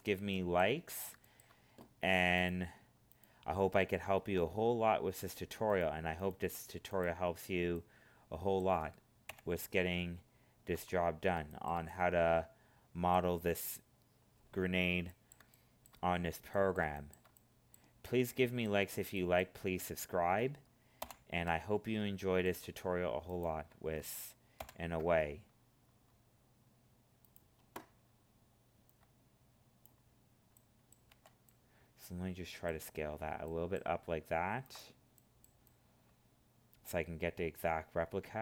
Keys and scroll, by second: 21.0 ctrl+l, 24.5 ctrl+l.